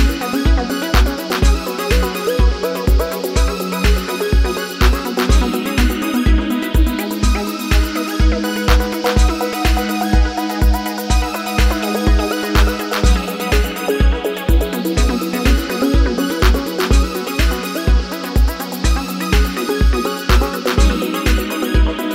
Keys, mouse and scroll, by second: 3.6 Delete, 5.1 ctrl+z, 5.6 ctrl+z, 6.9 ctrl+z, 7.3 ctrl+z, 11.2 ctrl+z, 11.5 ctrl+z, 11.8 ctrl+z, 12.1 ctrl+z, 12.7 ctrl+z, 15.7 double click, 19.9 double click.